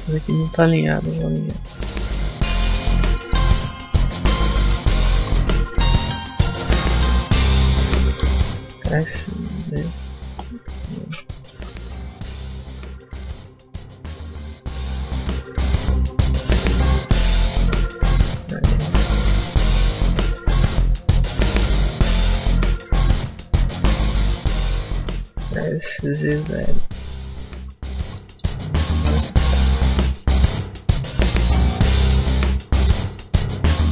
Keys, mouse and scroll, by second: 1.3 KP_1, 1.8 KP_5, 2.0 KP_3, 2.5 z, 3.1 shift+middle click, 4.6 middle click, 4.8 a, 5.0 a, 5.9 b, 8.1 s, 11.4 ctrl+z, 11.8 shift+middle click, 13.5 shift+middle click, 16.9 s, 19.2 scroll down 1, 19.3 shift+middle click, 20.4 a, 21.5 b, 25.3 s, 27.4 z, 27.8 Tab, 28.1 middle click, 28.9 KP_5, 29.8 middle click, 30.2 shift+middle click, 30.5 scroll up 1, 30.8 Tab, 31.3 a, 31.5 a, 31.9 Tab, 32.1 scroll down 1, 32.2 middle click, 32.6 Tab, 32.8 scroll down 2, 33.0 middle click, 33.6 Tab.